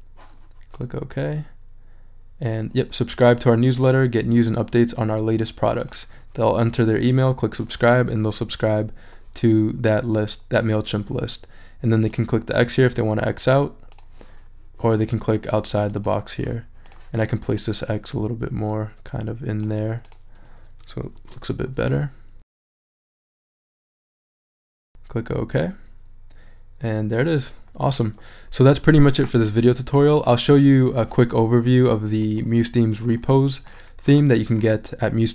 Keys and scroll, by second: 21.1 shift+super+e.